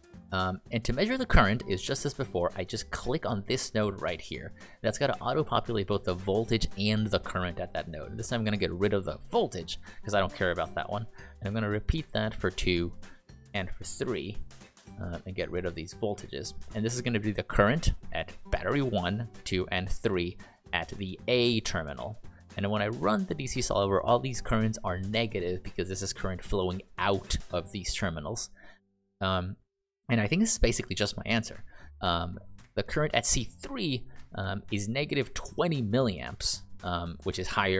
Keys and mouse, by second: 4.3 click, 11.7 click, 13.4 click.